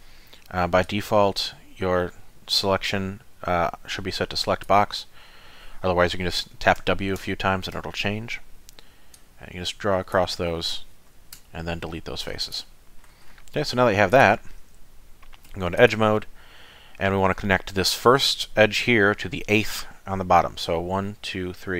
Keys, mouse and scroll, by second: 0.9 click, 6.4 w, 6.8 w, 7.2 w, 7.8 w, 9.1 click, 11.4 x, 14.1 click, 15.5 2, 15.8 click.